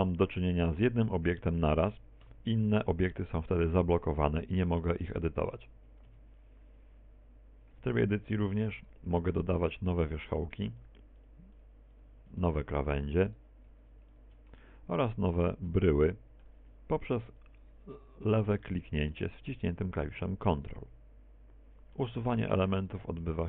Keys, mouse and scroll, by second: 0.3 KP_1, 2.0 KP_1, 2.6 right click, 3.4 middle click, 4.3 Tab, 5.0 right click, 5.4 right click, 5.7 right click, 6.1 right click, 6.4 right click, 6.8 right click, 7.2 right click, 7.6 right click, 8.1 Tab, 9.8 Tab, 10.8 right click, 11.6 ctrl+click, 12.1 ctrl+click, 12.9 ctrl+click, 13.2 ctrl+click, 13.6 ctrl+click, 14.0 ctrl+click, 14.9 right click, 15.4 shift+right click, 16.2 ctrl+click, 17.2 shift+right click, 17.6 shift+right click, 17.8 middle click, 19.4 ctrl+click, 20.0 middle click, 21.5 a, 21.8 z, 22.1 middle click.